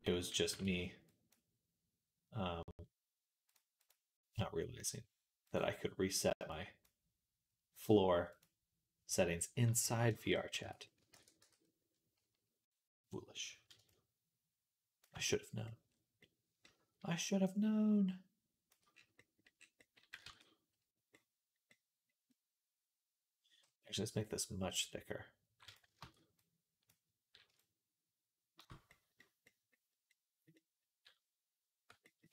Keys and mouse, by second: 1.2-3.7 middle drag, 3.7-6.7 drag, 6.7-8.2 middle drag, 8.2-32.3 drag, 10.4 Tab, 11.0 ctrl+a, 20.1 ctrl+s, 25.8 ctrl+z, 32.2 g.